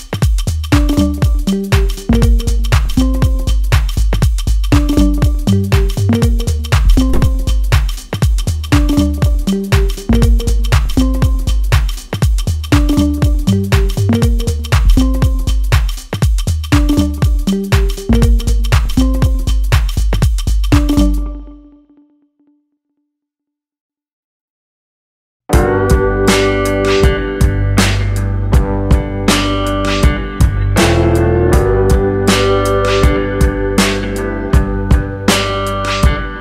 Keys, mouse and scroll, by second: 0.4 click, 0.7-2.2 click, 3.1 click, 5.1 shift+r, 5.8 shift+r, 12.5-14.0 click, 12.8 click, 16.6 click, 17.4 click, 20.8 r, 22.5 click, 22.8 r, 24.4 click, 24.7 r, 26.4 middle click, 29.9 shift+click, 30.3 shift+click, 30.9 shift+click, 31.6 ctrl+j, 31.9 middle click, 32.6 Tab, 32.9 middle click, 33.5 ctrl+click, 34.0 ctrl+click.